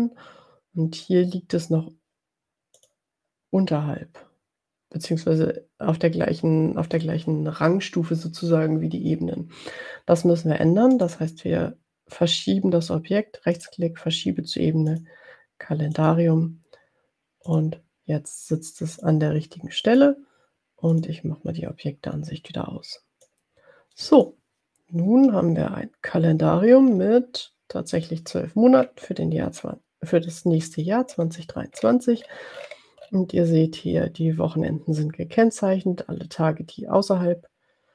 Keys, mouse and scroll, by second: 2.7 click, 10.9 right click, 13.7 click, 14.9 click, 15.9 click, 17.7 click, 19.0 click, 19.9 click, 20.9 click, 23.4-24.4 drag, 25.3-26.0 ctrl+scroll down 2, 27.1-27.4 ctrl+scroll down 2, 31.3 ctrl+scroll up 2, 32.1-33.2 ctrl+scroll up 6, 33.2 ctrl+scroll up 1, 37.4-37.9 drag.